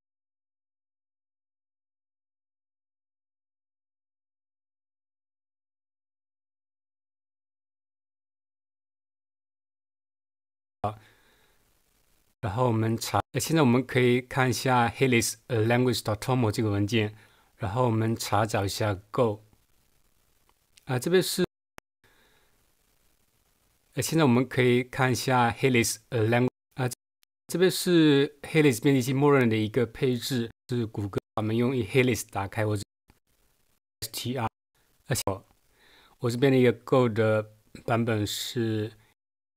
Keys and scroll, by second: 8.7 super+2, 10.5 space, 12.3 Right, 13.2 Left, 21.5 Left, 21.7 Left, 26.5 Right, 26.9 Left, 27.2 Right, 30.5 Right, 31.1 Right, 32.8 Right, 33.7 Right, 34.4 Right.